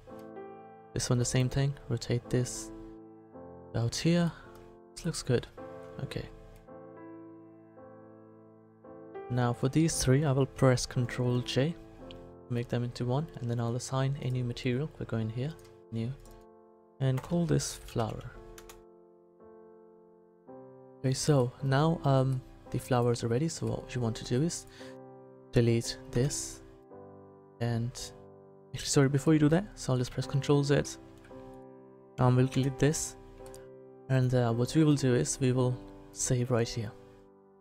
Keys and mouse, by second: 0.5 right click, 1.1 r, 1.3 click, 7.7-9.5 right drag, 11.4 ctrl+j, 14.2 click, 20.7 a, 24.0-26.1 right drag, 26.1 Delete, 26.9-29.2 drag, 30.1 ctrl+z, 30.8 ctrl+z, 32.5 Delete, 36.1 click.